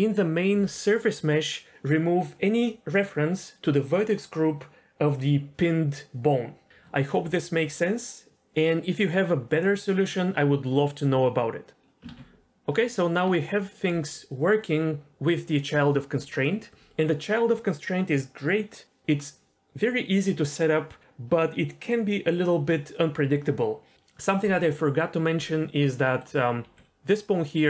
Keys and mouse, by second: 11.7 Tab, 12.1 ctrl+z, 12.7 Tab, 15.9 click, 25.9 middle click, 26.6 g.